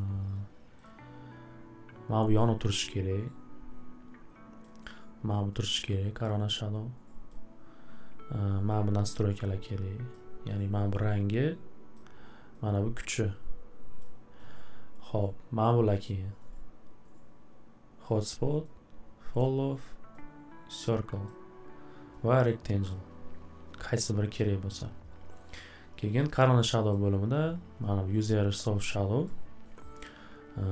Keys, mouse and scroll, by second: 0.8 click, 4.6 click, 7.3 click, 10.1 click, 11.9 click, 14.0 click, 18.0 click, 19.4 click, 21.2 click, 22.9 click, 26.9 click, 29.2 click.